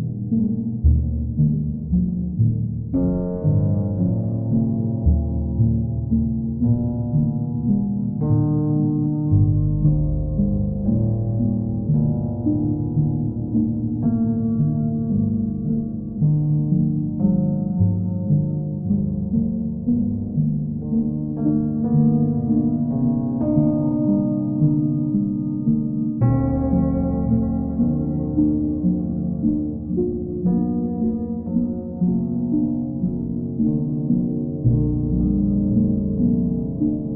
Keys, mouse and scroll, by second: 4.2 click, 5.5 ctrl+click, 6.7 ctrl+click, 7.1 ctrl+click, 11.7 click, 12.6 ctrl+click, 14.5 ctrl+click, 15.0 ctrl+click, 17.0 click, 18.0 click, 18.7 shift+click, 24.8 click, 25.7 alt+click, 26.8 ctrl+click, 28.7 ctrl+click, 31.3 ctrl+click, 31.8 alt+click.